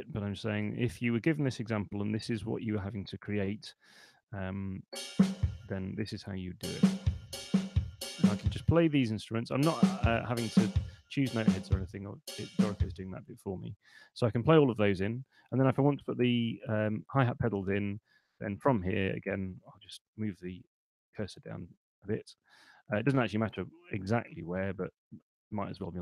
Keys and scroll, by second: 0.7 5, 2.2 3, 2.5 Return, 14.4 Escape, 15.4 super+Left, 19.8 Down, 23.4 Up, 23.8 Down, 24.2 Up, 24.4 Down.